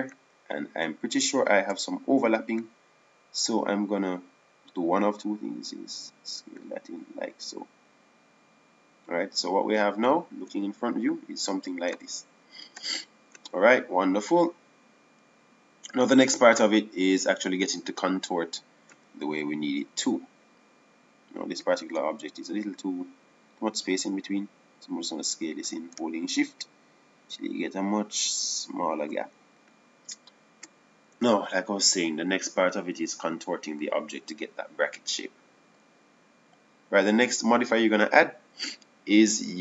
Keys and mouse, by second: 0.7 z, 1.3 z, 5.1 s, 10.7-11.8 right drag, 12.6 KP_1, 13.9 Tab, 15.4 Tab, 19.3 KP_1, 27.2 s, 32.6 KP_1.